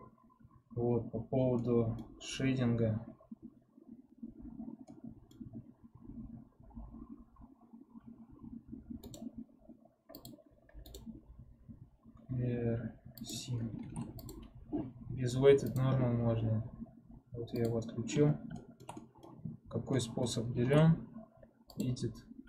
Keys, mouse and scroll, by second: 6.3-10.3 middle drag, 10.3-14.4 right drag, 14.4 ctrl+Tab, 15.6 click, 16.1-17.4 scroll up 1, 17.4 click, 18.1-18.5 scroll down 2, 18.5-19.5 shift+middle drag, 19.5-19.9 scroll up 1, 19.9-21.7 middle drag, 21.7 ctrl+Tab.